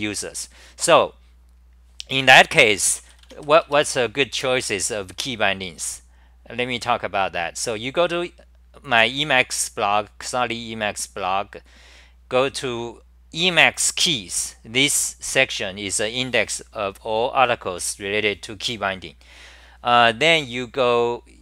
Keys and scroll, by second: 4.0 Return, 4.3 super+r.